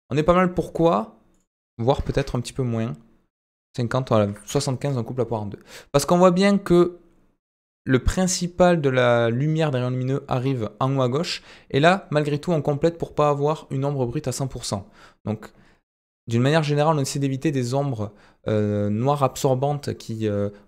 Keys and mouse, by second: 1.3-2.9 drag, 3.6-5.1 drag.